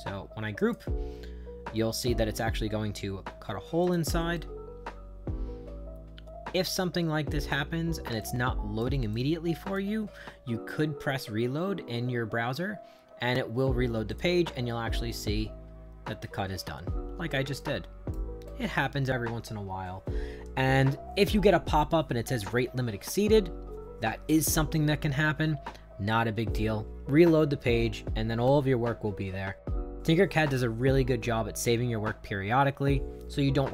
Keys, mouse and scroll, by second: 0.6 click, 3.8 click, 4.3-7.5 right drag, 8.2 shift+right click, 9.1 right click, 14.1 click, 17.6 shift+right click, 18.5 right click.